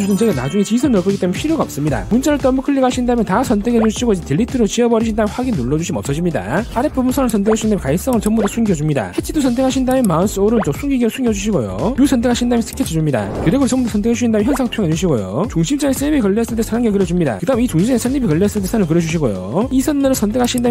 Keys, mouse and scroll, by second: 2.5 click, 2.7 click, 2.8 click, 3.9 click, 4.3 ctrl+a, 6.0 click, 7.5 right click, 7.9 v, 8.4 right click, 8.7 v, 9.0 click, 9.9 click, 10.6 right click, 11.8 click, 12.8 click, 13.8 click, 15.2 click, 16.0 click, 17.4 click, 18.1 1, 19.1 click, 20.5 click.